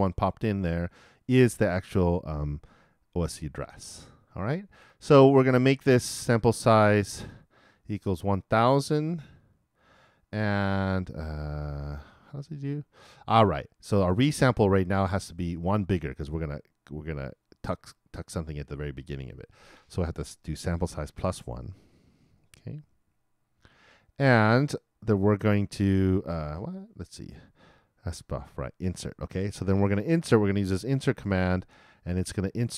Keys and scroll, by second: 21.2 shift+=.